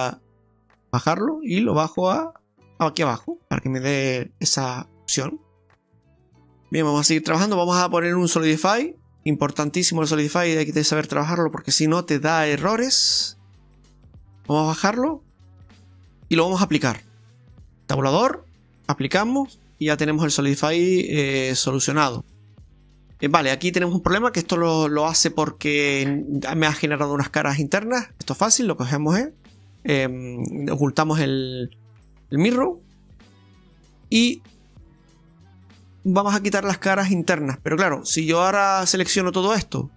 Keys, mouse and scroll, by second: 3.0 scroll down 2, 3.3 middle click, 3.9 Tab, 4.3 middle click, 5.3-5.8 scroll down 3, 5.8 middle click, 6.2 ctrl+z, 6.2 click, 6.2 middle click, 6.2 scroll down 1, 6.7 right click, 7.1 middle click, 8.6 click, 11.5 click, 13.2 middle click, 14.6 click, 17.9 Tab, 18.8 click, 19.8 Tab, 20.0 middle click, 20.7-21.8 scroll up 3, 21.8 shift+middle click, 22.6 middle click, 25.1-25.6 scroll down 5, 25.6 middle click, 29.2 click, 30.6 click, 30.8 click, 31.4-31.8 scroll up 2, 31.8 shift+middle click.